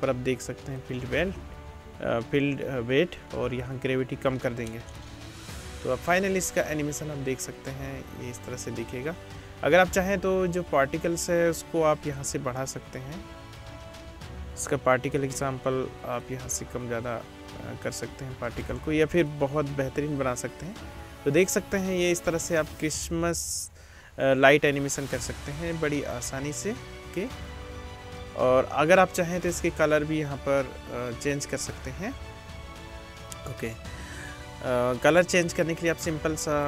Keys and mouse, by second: 0.8-10.5 middle drag, 5.9 space, 10.5 space, 16.6-19.9 middle drag, 19.9 space, 26.4-34.1 drag, 26.4-34.1 middle drag, 26.4-34.1 right drag, 34.1 space, 35.6-36.6 drag.